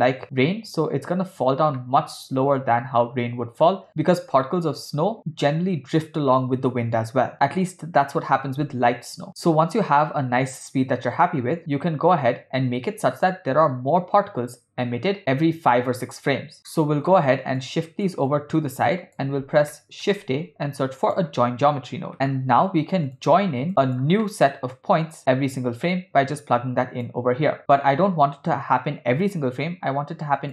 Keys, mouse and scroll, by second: 1.8-3.7 middle drag, 9.5 space, 11.8 space, 16.7 ctrl+middle click, 17.6 click, 18.8 click, 19.7 ctrl+middle click, 20.3 shift+a, 23.7 middle click, 23.7 scroll down 1, 23.8 click, 24.2 middle click, 25.2-27.2 drag, 27.8-30.5 drag.